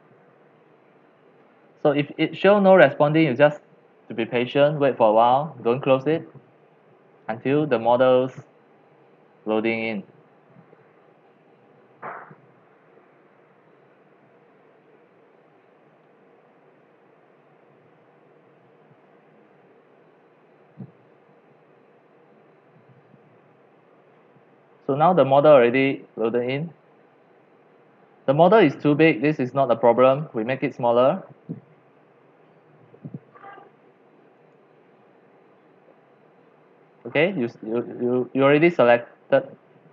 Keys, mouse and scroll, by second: 24.9-26.6 scroll, 26.6-34.3 middle drag, 26.6-27.1 scroll down 11, 27.1-28.8 scroll up 4, 28.8-29.3 scroll down 2, 29.8 scroll, 34.4 click, 38.2 middle click, 38.4-38.8 scroll down 6, 38.8 scroll up 3.